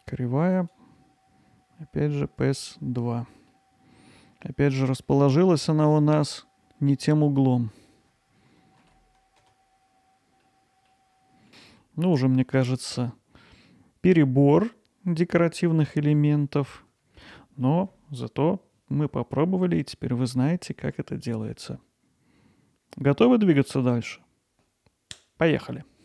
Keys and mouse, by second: 0.7-2.6 drag, 3.5 middle click, 7.4-8.8 drag, 9.1 middle drag, 9.5 alt+middle drag, 9.7 middle drag, 10.2-10.9 alt+middle drag, 11.1-11.6 alt+middle drag, 11.8-12.1 middle drag, 16.2-16.7 middle drag.